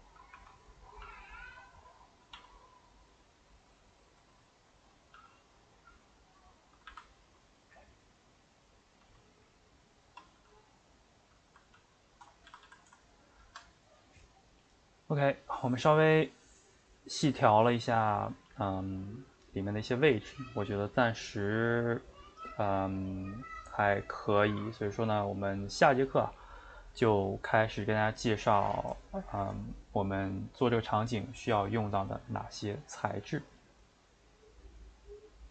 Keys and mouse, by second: 0.3 r, 1.0 g, 1.9 middle click, 2.3 s, 3.3-5.2 middle drag, 5.2 g, 6.6 middle click, 6.7 a, 6.9 a, 8.6 click, 9.0 s, 11.3-12.5 middle drag, 12.5 a, 12.6 a, 12.8-35.5 ctrl+middle drag.